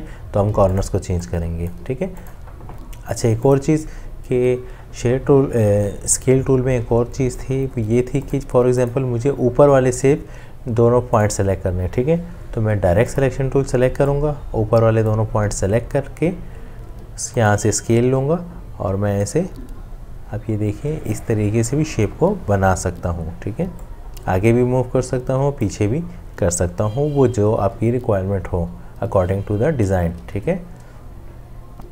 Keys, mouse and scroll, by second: 30.3 ctrl+z.